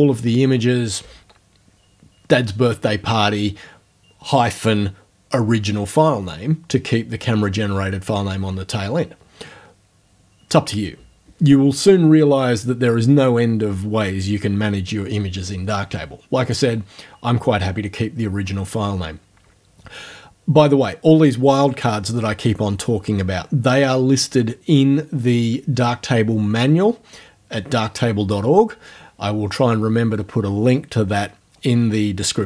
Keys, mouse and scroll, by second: 16.5 click.